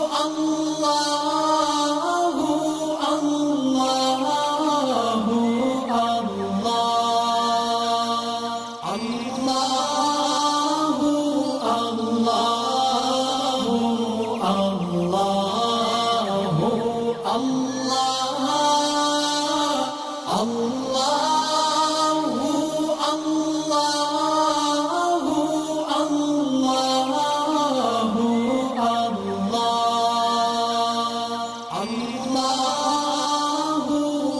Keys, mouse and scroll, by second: 1.3-1.9 click, 2.1-3.2 drag, 3.7 alt+scroll down 1, 5.1 click, 6.0 alt+scroll up 1, 7.7-8.0 alt+scroll down 1, 8.3 alt+scroll up 1, 8.8 shift+click, 11.4 ctrl+g, 13.9 click, 15.2 alt+scroll down 1, 15.7 click, 16.1 alt+scroll up 1, 16.6 click, 18.2 right click, 19.2 click, 20.7 right click, 21.6 click, 31.8 click.